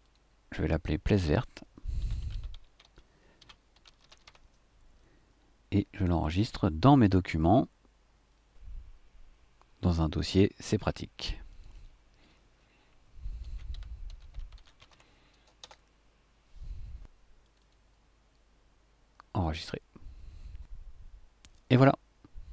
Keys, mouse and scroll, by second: 0.0 click, 0.5 click, 1.7-4.8 typing, 6.9 click, 11.5 click, 13.2-15.4 typing, 15.8 Return, 17.4 click, 19.4 click.